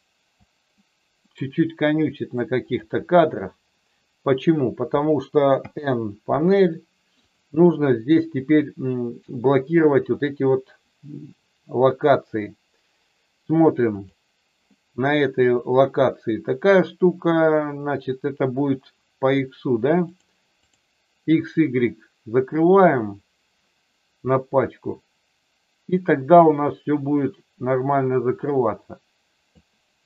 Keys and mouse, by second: 2.7 click, 5.6 n, 7.3 click, 20.1 click, 20.6 click, 24.7-29.6 drag.